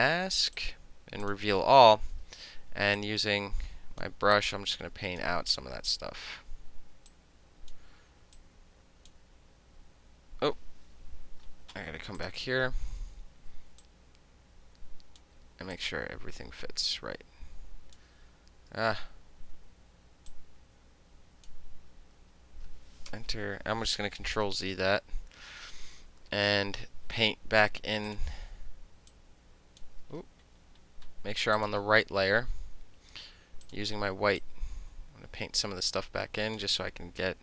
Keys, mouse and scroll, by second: 0.6 click, 1.3 click, 2.2 b, 3.0-4.0 drag, 4.4 click, 5.7 ctrl+z, 7.1 click, 8.4 click, 12.2 click, 12.7 ctrl+t, 13.9-15.2 drag, 15.8-18.0 drag, 20.3-21.5 drag, 21.8 ctrl+z, 22.2 ctrl+z, 23.2 KP_Enter, 24.3 ctrl+z, 28.1 click, 29.1 click, 30.0 ctrl+z, 31.6 click, 33.7 click, 34.4-36.6 drag.